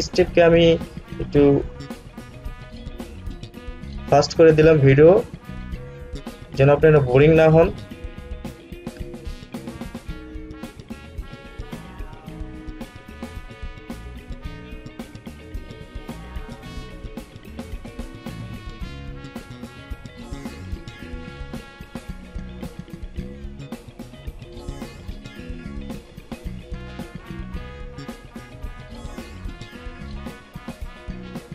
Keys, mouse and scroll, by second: 0.0-0.6 scroll up 1, 9.0-9.9 scroll up 1, 9.9-14.8 alt+drag, 14.8-24.2 alt+drag, 24.2-28.6 alt+drag, 28.6-30.9 scroll up 1, 30.9-31.5 drag.